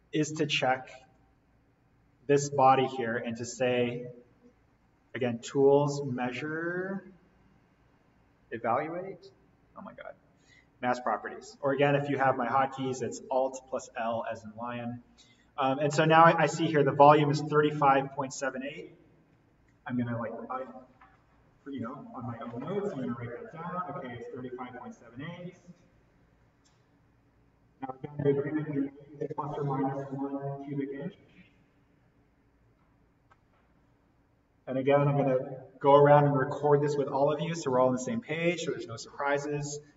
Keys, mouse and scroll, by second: 5.1 click, 10.9 click.